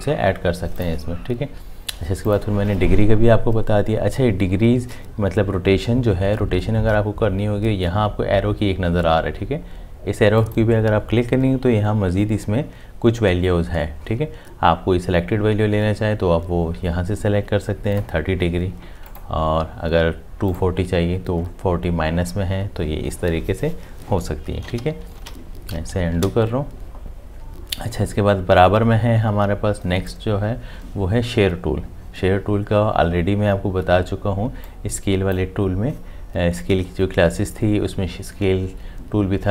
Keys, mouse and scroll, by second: 24.8 8, 25.4 ctrl+z, 26.1 ctrl+z.